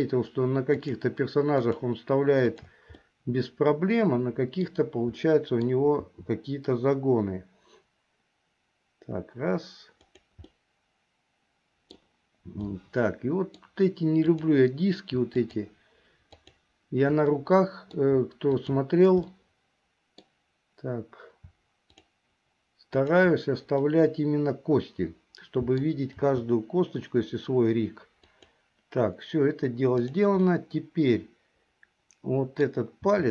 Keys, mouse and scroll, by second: 0.8 shift+click, 1.8 shift+click, 2.7 shift+click, 3.1-4.8 middle drag, 5.3 middle click, 6.2 r, 10.7-12.2 middle drag, 12.8 middle click, 14.5 click, 15.5 shift+click, 16.5 shift+click, 17.5 middle click, 18.7 shift+click, 19.4-20.5 middle drag, 21.9 shift+click, 23.1 shift+click, 24.0-26.1 middle drag, 26.4 r, 30.6-32.8 middle drag, 33.2 r.